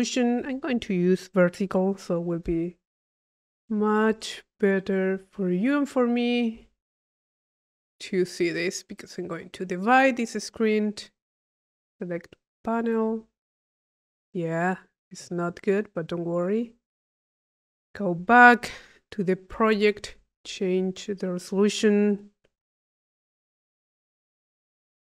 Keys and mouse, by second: 1.3 click, 7.6 click, 8.3 click, 9.5 click, 11.3 click, 12.7 click, 13.5 click, 15.0 click, 16.2 click, 17.4 click, 18.2 u, 18.8 click, 20.3 click, 21.2 click, 24.9 click.